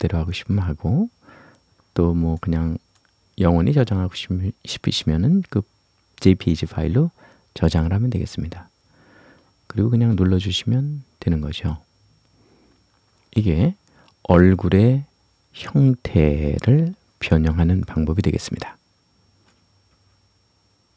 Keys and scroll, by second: 9.7 Return.